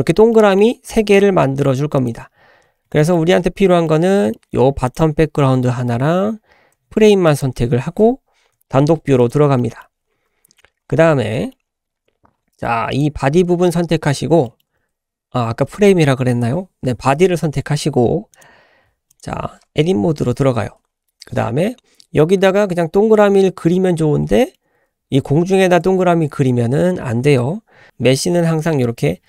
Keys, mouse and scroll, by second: 0.3 shift+middle drag, 0.5 shift+scroll up 1, 1.1-1.9 scroll up 3, 1.9 click, 2.3-2.8 scroll down 4, 2.9 shift+middle drag, 3.0 shift+click, 3.1 shift+middle click, 3.8-4.3 middle drag, 4.8 click, 5.2-6.0 scroll up 2, 6.5 scroll up 2, 7.3 shift+click, 8.5 /, 9.2 click, 9.6 middle drag, 10.0 `, 10.5-11.0 scroll up 5, 11.3-11.8 shift+middle drag, 11.8 shift+scroll up 1, 12.3-12.9 scroll up 1, 12.9 click, 13.8 scroll up 1, 14.4 shift+middle drag, 18.4 click, 19.1 click, 20.2 Tab, 21.3-23.0 scroll up 6, 24.3 shift+middle click.